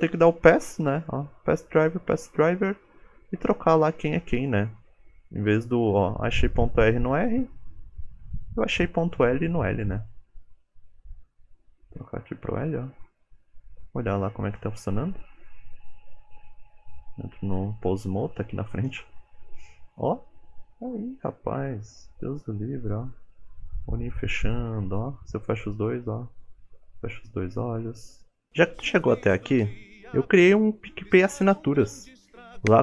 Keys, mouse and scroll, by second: 1.3 click, 15.0 click, 15.0 scroll up 2, 16.2 ctrl+Tab, 16.8 middle click, 18.3 click, 18.6-19.3 scroll down 3, 19.1 g, 24.1 g, 27.1 middle click, 27.4 shift+middle click, 27.6-28.1 scroll up 12, 28.1 shift+middle click.